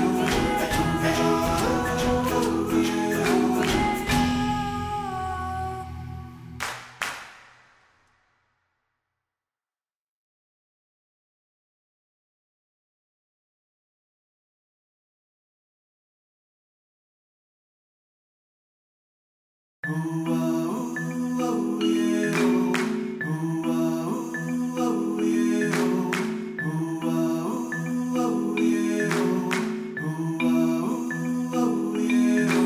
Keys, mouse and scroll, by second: 0.1 click, 1.3 click, 1.7-2.4 shift+middle drag, 2.4 KP_1, 2.9 ctrl+s, 3.8-4.8 shift+middle drag, 5.5 t, 6.1 shift+a, 7.3 click, 7.7 shift+d, 9.7 middle click, 9.9 s, 11.2 g, 12.9-13.9 drag, 14.2 g, 15.0-15.4 middle drag, 15.4 Tab, 15.8 alt+z, 15.9 middle click, 16.1 click, 16.4 g, 17.9 KP_1, 18.1 Tab, 18.4 ctrl+s, 18.4-19.5 scroll up 1, 20.4 shift+middle click, 20.5 alt+z, 20.7-22.3 shift+middle drag, 22.3 Tab, 22.4 middle click, 22.7 Tab, 23.4 click, 23.6 ctrl+a, 24.6 click, 25.2 middle click, 25.3-25.7 scroll up 1, 25.7-26.7 drag, 27.2 middle click, 27.3 right click, 27.7-28.9 middle drag, 28.9 ctrl+2, 29.2-29.7 shift+middle drag, 29.7 g, 31.2 ctrl+s.